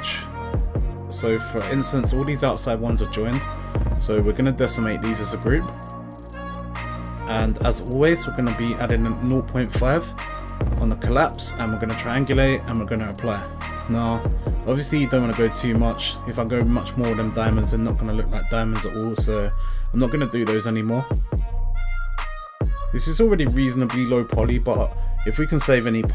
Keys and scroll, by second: 11.8 0, 12.1 ., 12.4 5, 12.9 Return.